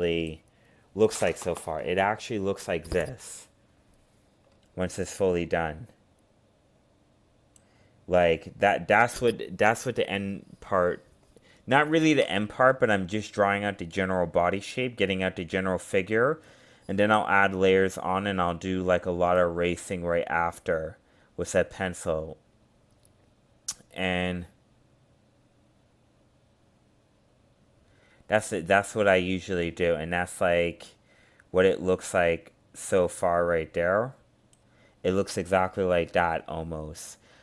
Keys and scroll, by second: 19.9 ctrl+z, 22.7 ctrl+z, 25.0 ctrl+z, 26.7 ctrl+z, 27.6 ctrl+z.